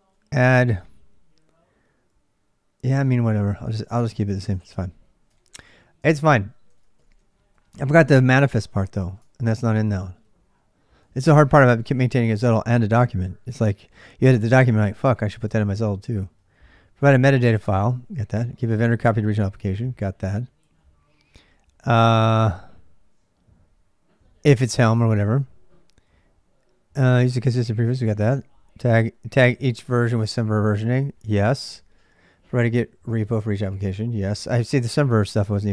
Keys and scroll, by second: 0.2 l, 1.9-5.3 typing, 2.7 ctrl+[, 3.7 ctrl+[, 4.3 ctrl+[, 5.1 ctrl+[, 5.8 ctrl+[, 5.9 ctrl+j, 6.5-13.0 typing, 9.0 ctrl+[, 15.3 ctrl+[, 15.5-17.2 typing, 24.6 k, 25.8 k, 27.8 j, 28.0 j, 28.9 k, 29.1 k.